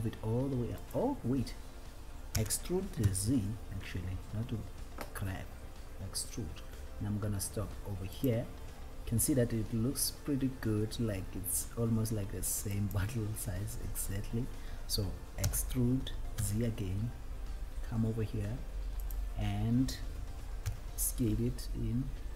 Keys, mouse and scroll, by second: 1.2 right click, 2.6 e, 3.4 z, 13.0 click, 13.1 click, 14.3 scroll down 1, 16.8 e, 19.4 click, 19.4 z.